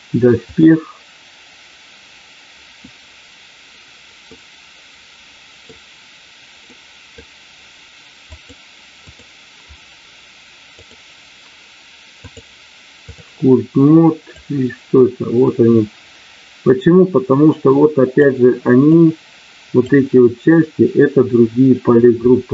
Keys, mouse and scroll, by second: 0.3-2.5 drag, 4.2-5.7 middle drag, 6.7 middle click, 12.2 click, 14.4-18.2 drag, 18.9 click.